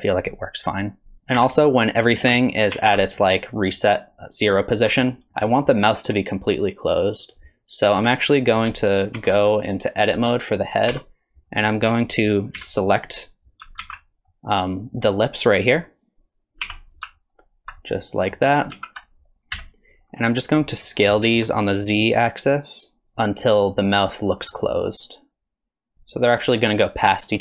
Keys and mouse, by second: 1.4 a, 2.7 alt+g, 2.7 alt+r, 9.2 ctrl+Tab, 9.8 click, 10.9 Tab, 12.6 KP_1, 13.8 alt+z, 14.3 click, 14.7 middle click, 16.6 3, 17.4 alt+click, 17.9 middle click, 18.7 alt+z, 19.5 KP_1, 21.2 shift+middle click, 23.0 s.